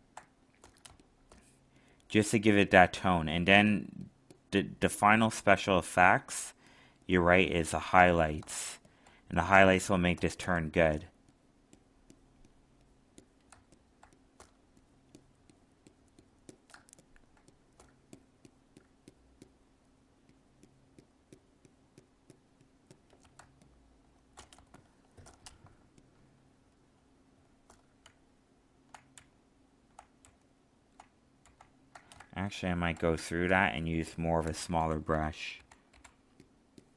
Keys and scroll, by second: 8.6 alt+space, 13.5 alt+space, 16.7 alt+space, 23.3 alt+space, 28.0 ctrl+z, 32.2 alt+space.